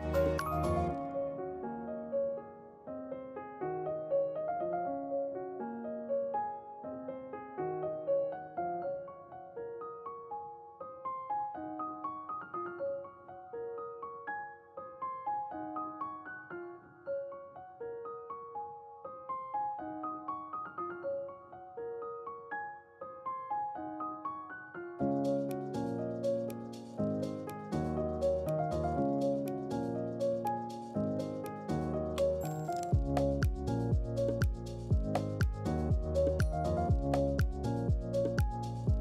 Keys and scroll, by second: 6.4 ctrl+q, 31.1 ctrl+c, 31.3 ctrl+v, 34.4 ctrl+q.